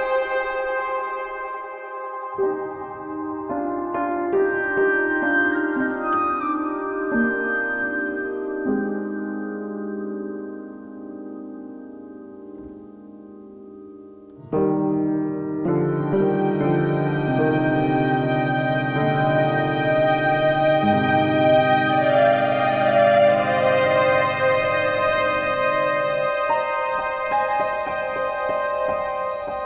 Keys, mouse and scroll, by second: 0.2 middle click, 0.4 q, 3.2-4.6 alt+middle drag, 6.6 alt+middle click, 7.8 alt+middle click, 9.8 click, 10.4-11.7 scroll, 11.7 g, 12.6 click, 13.8 click, 13.9 click, 14.7 z, 15.6 right click, 16.3 click, 16.9 middle click, 17.1 a, 17.3 click, 18.0 Delete, 18.5 middle click, 18.5 middle click, 18.6 middle click, 18.6 middle click, 19.2 alt+middle click, 19.2 alt+middle click, 19.4 scroll, 21.1 alt+middle click, 23.3 alt+middle click, 23.5-24.3 scroll, 24.7 alt+scroll, 26.5 click, 27.7 middle click, 27.8-28.4 scroll, 28.9 middle click, 29.4-29.6 scroll.